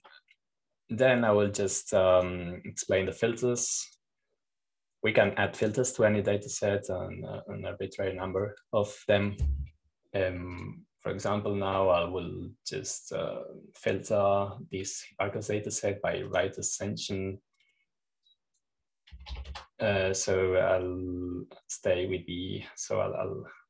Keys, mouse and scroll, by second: 0.1 click, 1.4-3.5 drag, 4.0-7.3 drag, 7.5-9.6 drag, 12.5-13.7 drag, 18.2-19.8 drag, 20.1-21.4 drag, 20.8-21.9 typing.